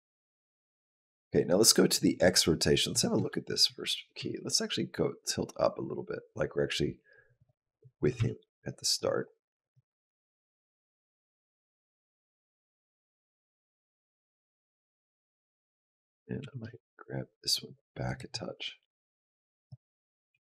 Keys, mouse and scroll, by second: 2.7 click, 3.1 shift+middle click, 3.8 g, 8.0 r, 9.5 click, 14.3 middle click, 15.1 click, 16.2 g, 18.7 click, 19.9 click, 20.1 g.